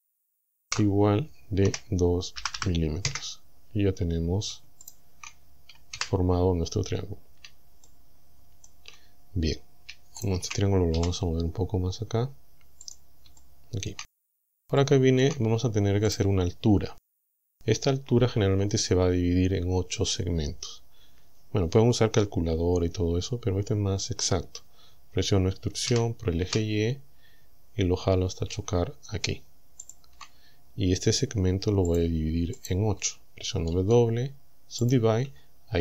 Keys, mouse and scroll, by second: 0.7 shift+0, 1.7 KP_2, 2.4 m, 3.1 KP_Enter, 4.9 shift+right click, 6.0 f, 6.6-7.0 scroll up 2, 7.1 scroll down 2, 7.7 shift+scroll down 2, 7.9-8.9 shift+middle drag, 10.3 shift+right click, 11.0 g, 12.9 click, 13.4 shift+middle click, 14.3-14.6 shift+scroll up 3, 14.8 shift+middle click, 16.1 right click, 25.9 e, 26.5 y, 29.9 ctrl+click, 31.9 click, 32.6 right click, 33.7 w, 34.9 click.